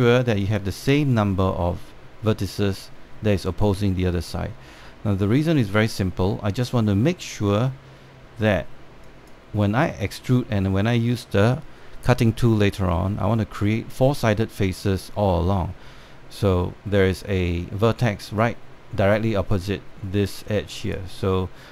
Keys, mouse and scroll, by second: 3.0 click, 6.2 click, 9.7 click, 15.2 click, 17.7-18.7 scroll up 1, 21.4 click.